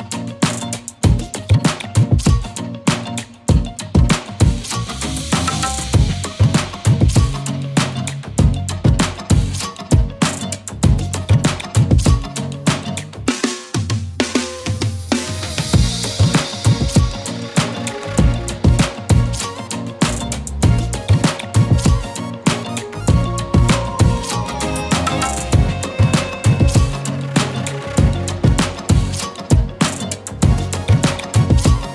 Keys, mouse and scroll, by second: 10.5 right click, 11.0 click, 14.1 shift+click, 15.3 ctrl+g, 16.6 click, 19.1 shift+click, 20.5 click, 22.9 ctrl+z, 23.6 click, 27.0-28.4 typing, 27.5 click, 27.9 click, 28.2 click, 28.5 click.